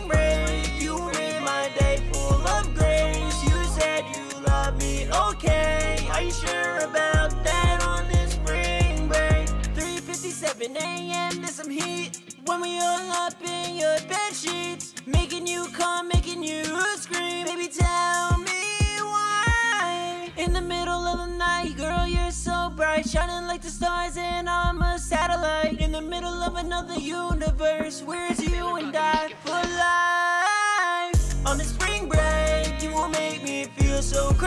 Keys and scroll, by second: 0.1 ctrl+super+w, 0.3 super+s, 20.9-22.2 typing, 33.5-34.4 typing.